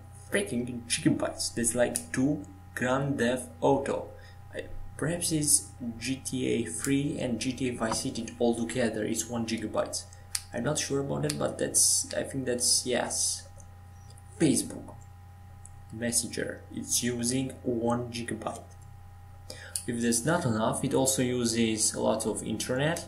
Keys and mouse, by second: 2.4 Tab.